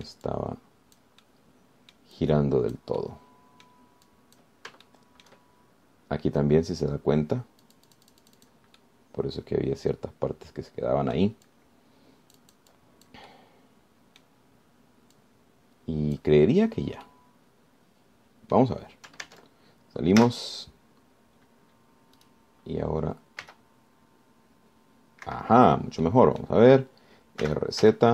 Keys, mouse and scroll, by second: 0.7 click, 1.3 scroll up 1, 1.5 click, 2.5 click, 4.2 middle click, 5.3 click, 6.1 shift+middle click, 8.9-9.9 drag, 10.0-12.6 middle drag, 12.7-14.5 drag, 14.5-15.6 drag, 16.4-17.6 drag, 18.3-19.9 drag, 20.5 ctrl+Tab, 21.4 z, 22.9 scroll up 2, 23.4 click, 24.7 r, 26.5 Escape, 26.9 scroll down 1, 27.3 click.